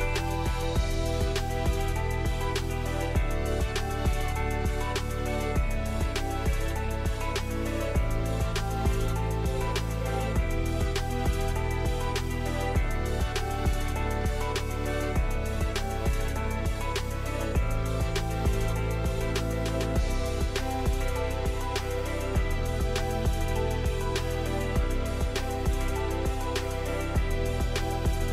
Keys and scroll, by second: 0.0 6, 0.8 Tab, 1.7 Escape, 11.0-12.0 typing, 14.8-16.2 typing, 24.7 a.